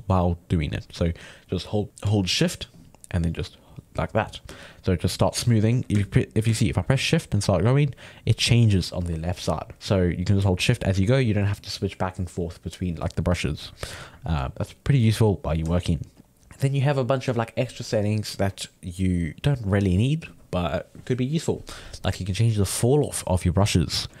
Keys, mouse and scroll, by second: 1.0-2.7 middle drag, 2.7-4.1 shift+drag, 4.1 middle click, 4.6-9.7 shift+drag, 9.7 middle click, 10.5-13.5 shift+drag, 14.1-16.2 middle drag, 16.2 shift+click, 16.4-19.5 middle drag, 22.7-24.2 drag.